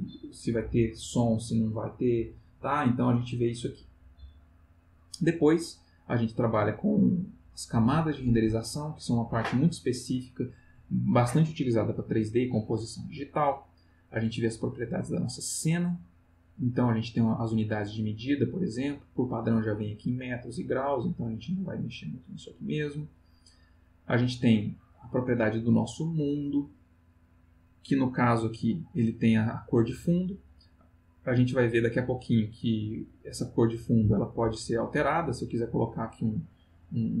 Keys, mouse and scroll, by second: 3.1 click, 5.9 click, 13.4 click, 17.1 click, 21.4 click, 22.2 click, 24.0 click, 33.1 click, 34.4-35.6 drag.